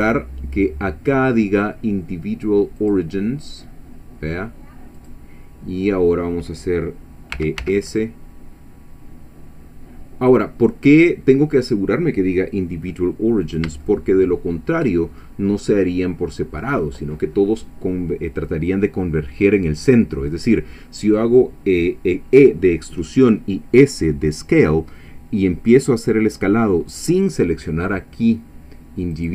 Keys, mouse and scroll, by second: 2.8 click, 5.0 click, 7.4 e, 7.6 s, 13.4 shift+click, 13.8-14.9 shift+middle drag, 15.3 shift+scroll down 1, 29.1 click.